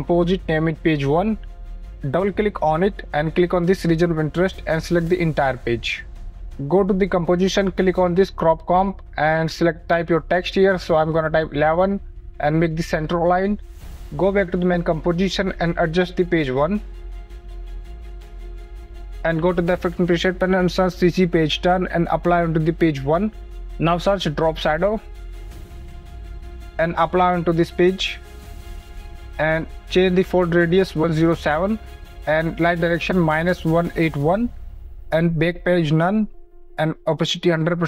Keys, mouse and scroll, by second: 0.1 click, 0.5-1.8 typing, 2.2 click, 7.6 click, 11.9 KP_1, 13.2 click, 14.6 click, 18.1 click, 20.0-22.2 typing, 22.4 click, 22.6 click, 23.9 click, 24.5-26.8 typing, 24.7 click, 27.3 click, 27.5 click, 29.3 click, 30.4 KP_1, 30.6 KP_0, 30.7 KP_7, 31.0 Return, 32.4 click, 33.0 -, 33.4 KP_1, 33.5 KP_8, 33.8 KP_1, 33.9 Return, 35.5 click, 36.0 click.